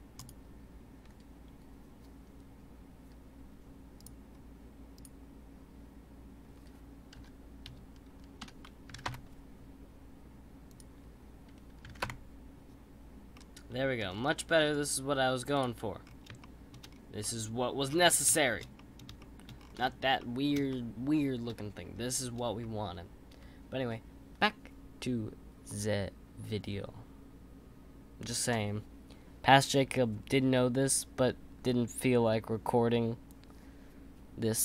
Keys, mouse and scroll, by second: 0.1-3.3 drag, 4.3-4.9 scroll down 1, 4.9-8.1 drag, 10.7-13.3 drag, 13.3-14.0 middle drag, 14.0-14.5 scroll up 4, 14.5-15.5 scroll down 3, 15.5 click, 16.0-16.4 scroll up 3, 16.4 shift+middle click, 16.9 scroll up 2, 17.2-17.8 middle drag, 17.8-18.3 scroll down 2, 18.3-19.5 shift+middle drag, 19.5-20.2 scroll up 2, 20.2-21.5 middle drag, 21.5-23.0 scroll down 2, 23.0-24.9 scroll down 1.